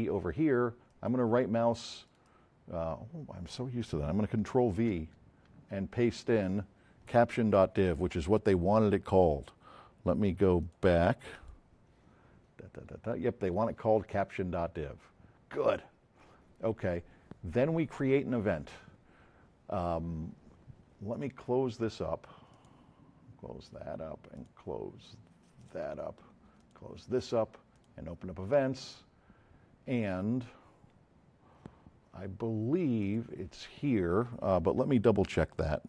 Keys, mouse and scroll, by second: 0.9 right click, 2.2 right click, 4.9 ctrl+v, 10.6 click, 13.5 click, 22.5 click, 22.9 click, 24.4 click, 25.6 click, 26.6 click, 27.7 click, 33.0 click.